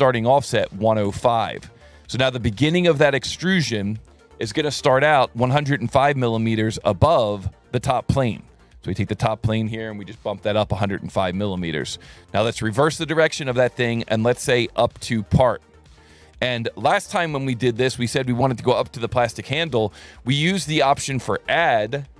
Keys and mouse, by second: 0.6 KP_1, 0.7 KP_0, 1.1 KP_Enter, 4.8 click, 5.6 ctrl+shift+click, 7.8 ctrl+shift+click, 9.4 click, 10.8 alt+1, 13.0 click, 14.5 click, 15.7 click, 18.4 click.